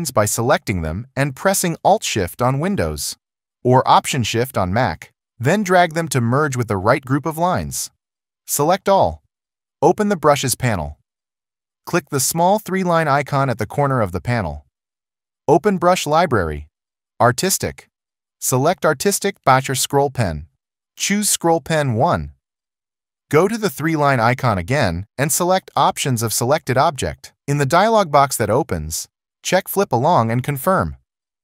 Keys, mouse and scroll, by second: 0.8 alt+click, 30.7 click.